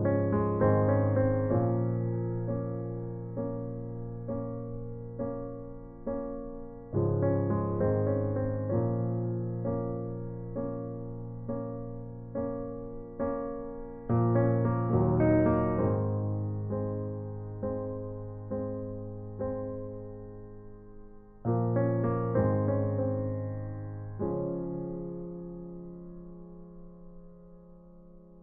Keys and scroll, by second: 4.9 ctrl+t, 8.7 ctrl+shift+z, 14.2 shift+Return, 28.0 v.